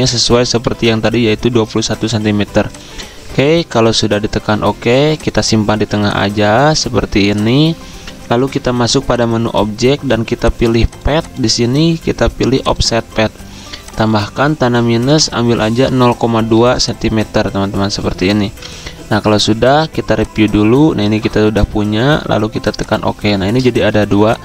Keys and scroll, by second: 0.0-1.1 typing, 15.1 -, 18.6 2, 23.9 z.